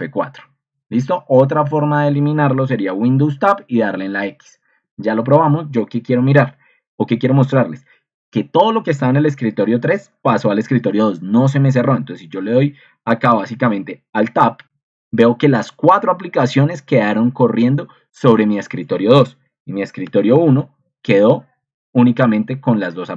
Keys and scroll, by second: 2.7 super+Tab, 5.2 Escape, 13.6 Escape, 14.2 alt+Tab, 20.2 ctrl+super+Left, 20.5 alt+Tab, 22.3 alt+Left.